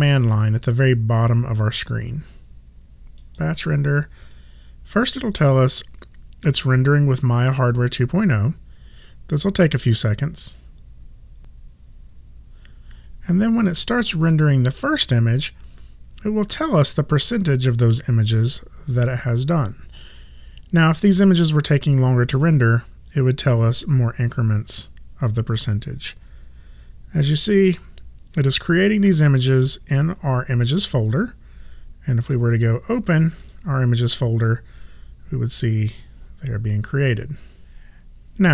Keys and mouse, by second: 3.2 click, 32.2 click.